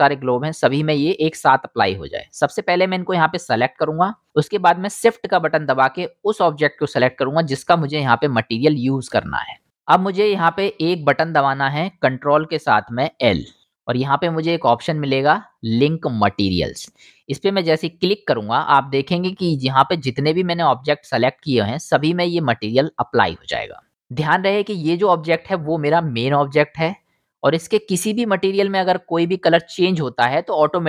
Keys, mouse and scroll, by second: 0.2-1.5 drag, 2.2-3.6 drag, 2.8-7.8 middle drag, 2.8-3.6 right drag, 7.8-9.9 shift+drag, 9.9-10.5 middle drag, 10.5-21.8 drag, 13.6 ctrl+l, 21.8-23.3 right drag, 23.3-30.8 drag.